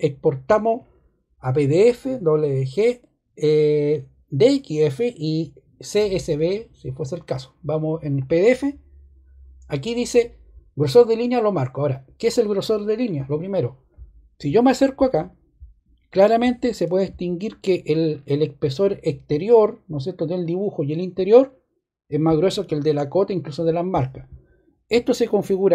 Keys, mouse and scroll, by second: 13.1 middle click, 14.2 middle click.